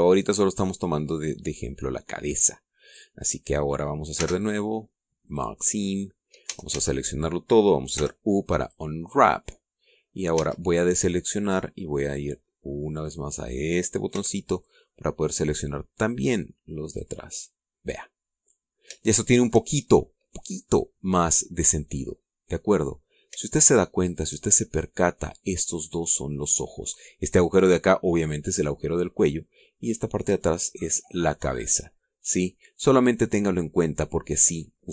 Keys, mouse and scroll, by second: 0.3 scroll down 1, 0.8-4.6 middle drag, 4.6-5.7 scroll up 1, 5.1 space, 5.7 scroll up 1, 6.2 click, 6.5-7.4 scroll up 1, 7.4-8.2 scroll up 1, 7.4 a, 8.2-8.9 scroll up 1, 8.9-9.5 scroll up 1, 8.9 u, 9.5-11.0 scroll up 1, 9.6 click, 11.2 a, 11.6-12.7 middle drag, 14.0 click, 15.0 b, 15.6-18.1 drag, 19.3-19.7 scroll up 1, 19.9 shift+middle click, 20.8-22.7 shift+middle drag, 23.6-24.1 scroll up 1, 24.4 shift+right click, 25.7 middle click, 32.5 scroll down 2, 32.8-34.6 drag, 34.8-34.9 scroll up 2.